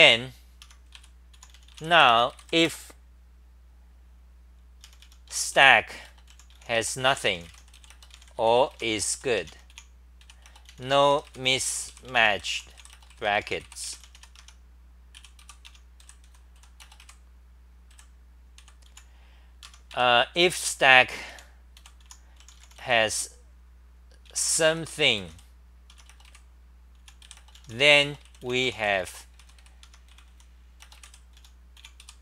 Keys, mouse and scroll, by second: 0.6 Home, 0.9 ;, 1.3 u, 14.4 Home, 14.9-18.9 typing, 19.6 Home, 19.9-22.5 typing, 25.9 Home, 27.0 u, 29.8-32.2 typing.